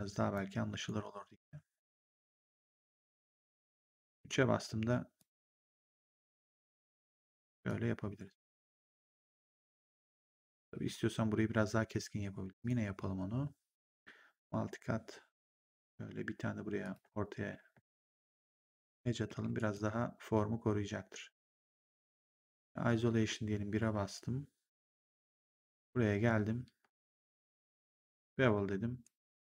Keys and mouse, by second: 0.2 click, 2.0 click, 3.8 3, 5.1 click, 6.6 click, 9.3 right click, 10.1 1, 12.4 click, 13.7 click, 15.6 ctrl+click, 16.7 ctrl+click, 18.6 3, 19.2 w, 19.5 right click, 22.0 ctrl+1, 23.7 1, 25.1 right click, 25.6 click, 26.9 shift+click, 28.9 right click, 29.2 3.